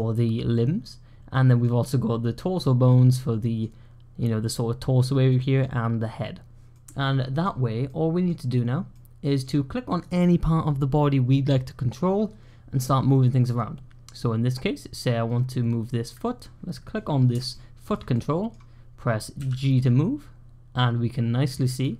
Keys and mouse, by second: 1.2-1.5 middle drag, 2.7-3.5 middle drag, 5.1-5.5 middle drag, 6.6-7.3 middle drag, 7.7-8.1 middle drag, 8.8-9.3 middle drag, 9.9-16.0 drag, 17.2 typing, 17.4-17.8 shift+drag, 18.0 click, 21.6-21.9 typing.